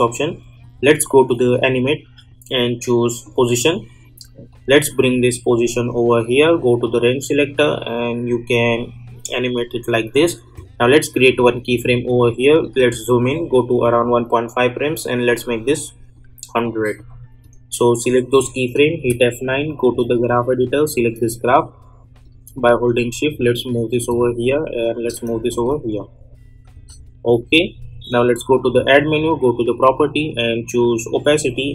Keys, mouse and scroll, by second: 12.8 =, 13.8-19.0 drag, 19.0 F9, 19.8-25.5 drag, 25.5 space, 27.5 click, 31.4 click.